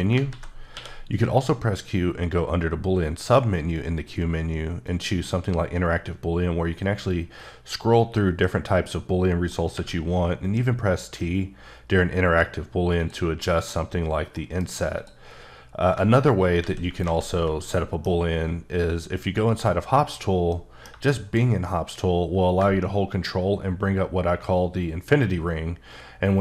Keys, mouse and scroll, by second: 0.2 ctrl+z, 0.7 q, 4.8 click, 5.5-7.6 scroll up 9, 8.3 scroll up 1, 8.4 middle click, 9.7 t, 13.0 click, 13.4 middle click, 14.3 middle click, 14.7 scroll up 1, 14.9 click, 16.6 ctrl+z, 17.0 ctrl+z, 17.6 middle click, 19.4 click, 20.5 middle click.